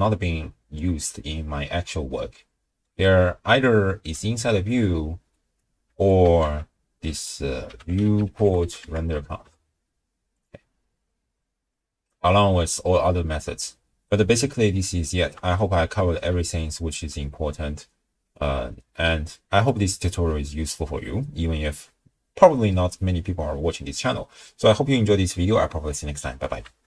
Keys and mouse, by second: 2.2 click, 2.2 middle click, 2.4 click, 2.4 middle click, 5.4 ctrl+alt+click, 6.0 click, 6.4 ctrl+a, 13.7 click, 13.7 middle click, 13.9 click, 14.6 ctrl+click, 15.1 ctrl+middle click, 15.6 middle click, 16.5 ctrl+click.